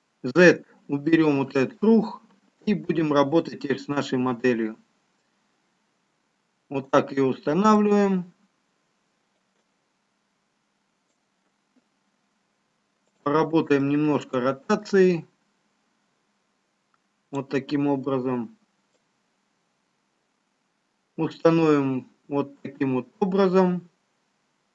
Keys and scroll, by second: 4.7 z.